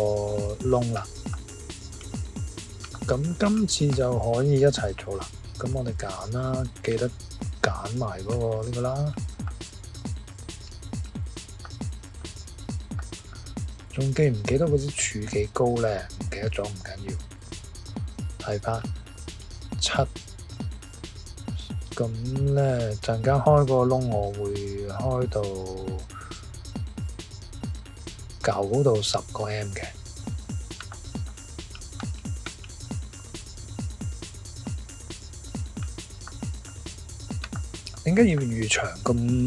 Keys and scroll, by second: 1.9 typing, 6.9 typing.